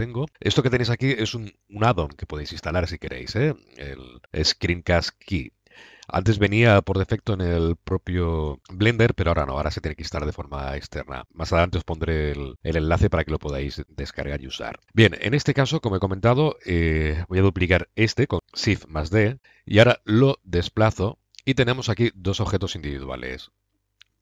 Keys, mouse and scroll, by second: 2.4-4.3 middle drag, 6.3 middle click, 6.7 click, 6.8 middle click, 6.9 click, 7.1 middle click, 7.2-9.2 drag, 9.3-10.0 middle drag, 14.8 n, 15.4-17.0 drag, 17.0 middle click, 18.3 shift+d, 19.7-20.6 drag, 21.7-22.0 middle drag, 23.5 middle click, 24.0-24.2 drag.